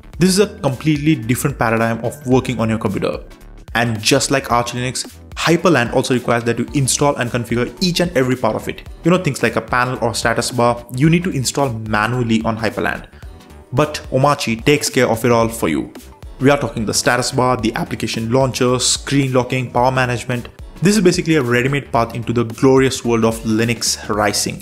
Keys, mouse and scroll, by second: 0.2 super+w, 0.5 super+space, 1.9-2.8 typing, 3.0 Down, 3.4 Return, 5.5-7.1 typing, 5.7 KP_Add, 7.3 KP_Enter, 9.2 super+w, 10.1 super+space, 10.6 Down, 10.7 Down, 10.8 Down, 10.9 Down, 11.0 Down, 11.1 Down, 11.7 Down, 12.3 Down, 12.6 Up, 12.7 Up, 12.8 Up, 12.9 Up, 13.1 Up, 13.2 Up, 13.3 Up, 13.5 Up, 13.8 Up, 15.1 Return, 17.5-20.3 typing, 21.8 click, 22.1 Return.